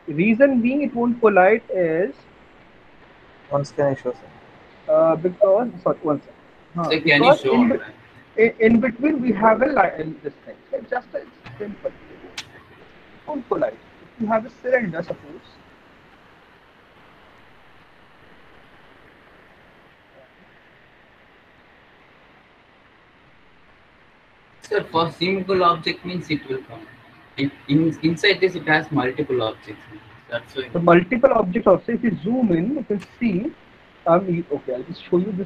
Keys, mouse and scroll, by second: 2.1 F3, 4.2 alt+middle click, 5.0 middle click, 5.1 alt+middle click, 5.6 alt+middle click, 6.1 middle click, 6.7 F3, 8.0 middle click, 10.2 middle click, 10.3 middle click, 11.7 click, 13.4 click, 14.4 click, 16.7 click, 19.4 alt+middle click, 22.7 click, 22.7 e, 25.0 click, 25.7-27.0 typing, 28.2 alt+middle click, 28.8 middle click, 30.1 alt+middle click, 30.5 middle click, 30.8 middle click, 31.4 middle click, 31.6 middle click, 32.4 middle click, 32.8 middle click, 33.3 middle click, 35.2 alt+middle click.